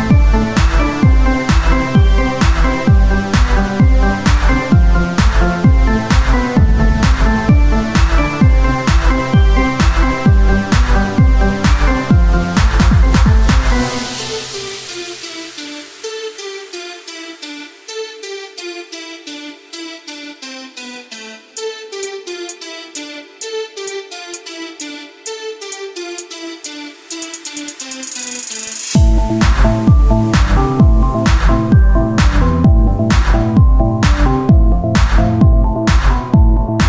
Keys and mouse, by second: 0.9 z, 1.6 click, 3.8 Tab, 5.5 KP_1, 8.0 KP_1, 8.3 z, 11.1 KP_1, 12.5 click, 12.9 c, 14.3-16.3 drag, 14.3 r, 16.4 KP_1, 17.6 KP_3, 18.3 r, 19.1-20.4 drag, 20.7 ctrl+z, 21.7 c, 23.0 r, 24.1-25.3 drag, 24.6 KP_1, 26.6 click, 27.6 Tab, 27.8 z, 30.0 click, 30.8 KP_1, 31.9 z, 34.0 click, 34.8-36.8 drag.